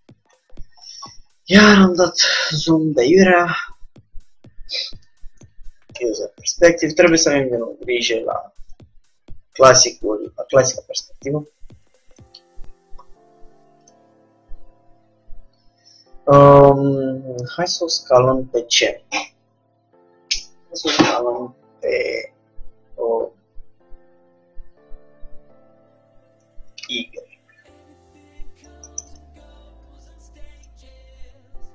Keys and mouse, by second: 3.1-4.9 drag, 3.3 g, 6.1 KP_3, 7.3 g, 11.3 r, 13.0 g, 22.0 s, 30.0 r, 31.1 g.